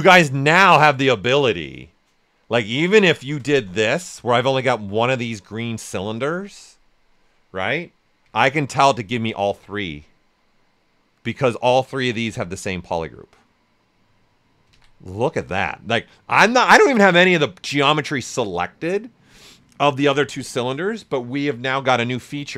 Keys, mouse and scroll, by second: 0.1 shift+f, 3.3 ctrl+shift+click, 3.8 ctrl+shift+a, 4.2-8.5 shift+right drag, 8.5 ctrl+shift+q, 9.8-14.7 right drag, 14.7 ctrl+z, 22.2 ctrl+shift+q.